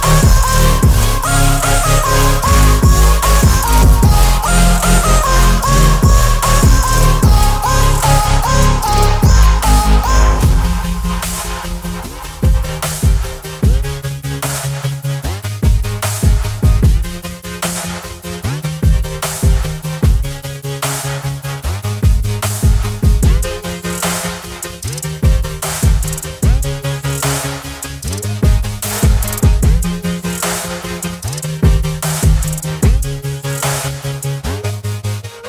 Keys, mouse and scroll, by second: 1.3 t, 1.3 click, 2.3 ctrl+t, 3.9-4.5 click, 8.0-11.8 alt+drag, 12.5 alt+click, 24.0 ctrl+g, 24.5 click, 25.7-27.1 typing, 28.5-30.8 typing, 30.9 Return, 33.3-35.4 drag.